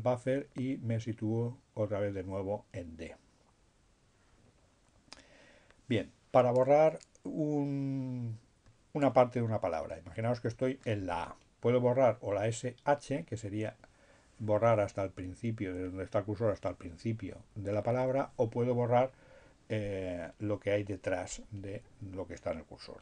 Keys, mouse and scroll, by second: 7.6 Left.